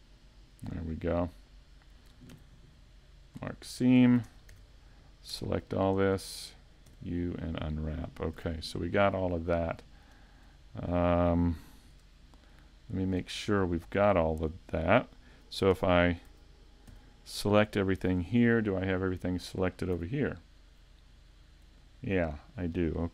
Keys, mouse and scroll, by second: 0.4 shift+right click, 0.8 scroll down 2, 1.1 middle click, 2.3 ctrl+e, 3.6 middle click, 4.3 ctrl+Tab, 6.0 alt+right click, 6.9 u, 8.4 scroll down 4, 8.4 a, 9.0-9.8 scroll down 3, 9.8 shift+middle click, 10.3 scroll down 1, 10.6 shift+middle click, 11.9 KP_5, 12.2 scroll down 1, 12.7 middle click, 13.3 shift+middle click, 13.7 scroll up 1, 15.7 a, 19.2 middle click, 19.2 scroll up 1, 20.0 z, 20.2 middle click.